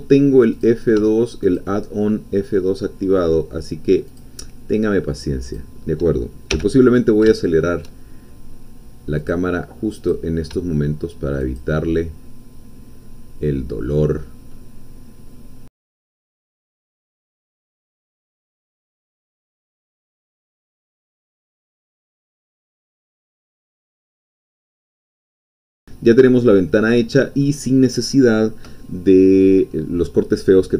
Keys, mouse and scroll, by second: 0.6 click, 1.4 shift+click, 2.0 shift+middle click, 2.8-4.2 shift+scroll down 2, 4.2-5.7 shift+drag, 6.6 f, 7.4 shift+middle click, 9.3-10.3 drag, 11.6-14.0 shift+drag, 14.0-15.7 shift+middle drag, 15.7 shift+click, 15.9 ctrl+shift+z, 15.9 middle click, 16.1 shift+click, 16.2 f, 16.3 click, 16.5 scroll down 2, 16.7 shift+click, 16.8 f, 16.9 middle click, 17.0 scroll up 2, 17.1 shift+middle click, 17.3 shift+click, 17.5 ctrl+shift+z, 17.8 shift+click, 17.8 shift+middle click, 18.2 shift+click, 18.5 f, 18.6 scroll down 2, 18.6 shift+middle click, 18.7 scroll up 2, 19.0 shift+click, 19.1 shift+middle click, 19.7 middle click, 19.8 shift+click, 19.9 f, 20.3 shift+middle click, 20.4 click, 20.6 click, 20.7-21.2 scroll up 4, 20.9 shift+click, 21.4 shift+click, 21.4 shift+middle click, 21.6 shift+click, 21.7 f, 22.0 shift+middle click, 22.1 click, 22.2 shift+middle click, 22.4 click, 22.6 click, 22.8 shift+click, 23.1 shift+middle click, 23.2 shift+click, 23.3 ctrl+shift+z, 23.4 shift+click, 23.4 ctrl+shift+z, 23.4-24.0 ctrl+shift+scroll up 4, 23.7 shift+click, 24.0 scroll down 2, 24.1-24.7 scroll up 4, 24.7 ctrl+z, 24.8 shift+click, 24.9 scroll down 2, 24.9 f, 25.1 shift+click, 25.4 scroll up 2, 25.5 scroll down 2, 25.6 Tab, 25.7 click, 25.9-30.7 middle drag.